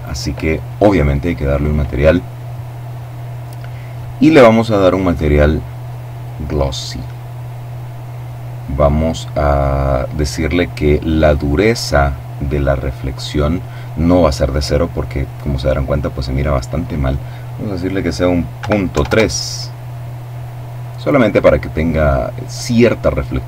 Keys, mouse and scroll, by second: 4.0 click, 5.7 click, 10.5 click, 17.7 KP_Decimal, 18.0 KP_3, 18.2 KP_Enter.